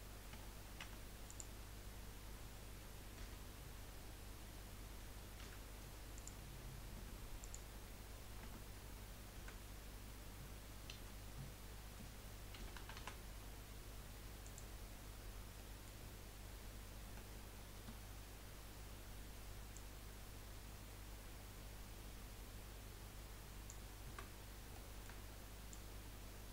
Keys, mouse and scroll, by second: 0.3 Tab, 0.8 Tab, 1.3 click, 3.2 l, 5.4 p, 6.9 Tab, 7.4 click, 8.4 Tab, 9.4 a, 10.9 F3, 15.6-16.6 middle drag, 16.6 KP_1, 17.7 KP_3, 18.7 scroll up 1, 19.7 click, 24.0-24.7 scroll up 3, 24.9 shift+middle click, 25.7 click.